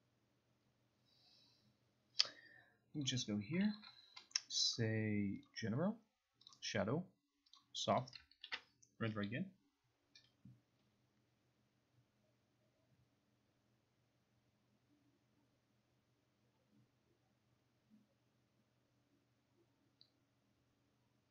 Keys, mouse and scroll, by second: 3.2 click, 3.8 shift+click, 5.5 click, 6.6 click, 7.6 click, 8.1 click, 8.5 ctrl+r.